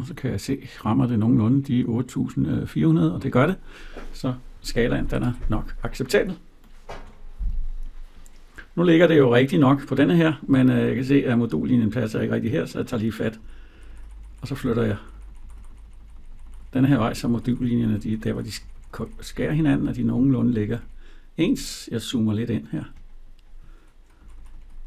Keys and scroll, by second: 4.8 Escape, 13.1 Left, 24.0 Left.